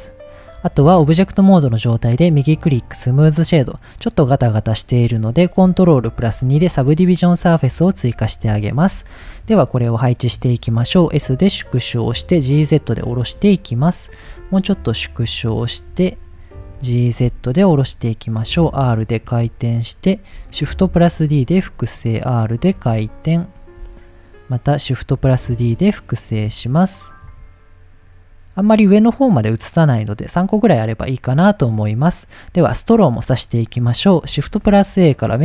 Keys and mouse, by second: 2.1 right click, 3.3 shift+middle click, 6.4 ctrl+2, 8.2 shift+click, 8.6 click, 10.9 s, 11.8 click, 12.2 z, 12.8 click, 13.4 shift+middle click, 14.2-19.2 typing, 15.1 click, 15.8 click, 16.2 click, 17.0 click, 19.1 click, 19.9 click, 20.6 shift+d, 21.2 click, 21.5 r, 22.0 click, 22.6 r, 22.8 x, 23.3 click, 23.9 shift+middle click, 25.1 shift+d, 26.1 click, 26.3 r, 26.9 click, 27.3 g, 28.0 click, 29.9 drag, 30.6-30.9 middle drag, 32.1 middle click, 34.5 shift+a.